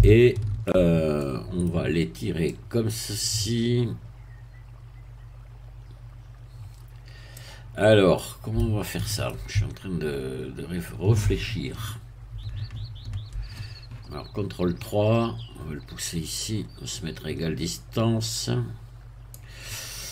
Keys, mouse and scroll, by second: 0.0 shift+middle click, 1.2 middle click, 2.5-7.5 drag, 8.1-9.4 middle drag, 10.4-11.7 scroll up 1, 11.7 KP_3, 13.8-14.2 scroll up 2, 14.6-15.4 scroll down 2, 16.4-19.5 drag.